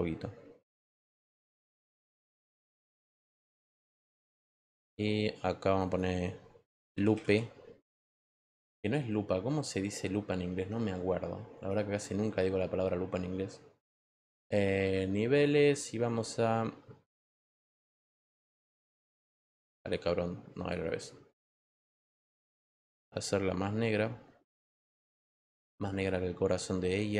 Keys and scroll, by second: 4.1 Return, 6.4-7.6 typing.